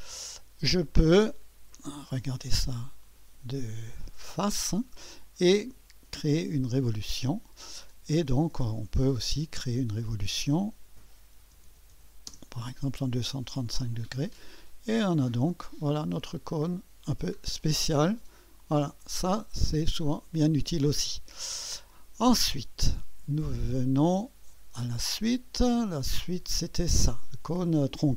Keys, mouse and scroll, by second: 0.0 click, 1.7 1, 2.4-6.1 right drag, 3.1-3.8 typing, 6.5 click, 10.1 click, 11.2-12.4 typing, 13.3-14.4 drag, 14.7-16.7 drag, 17.6-19.5 drag, 18.5 typing, 20.2-21.9 middle drag, 21.9 click, 23.7 click, 24.6-25.3 typing, 25.1 click, 26.7 typing.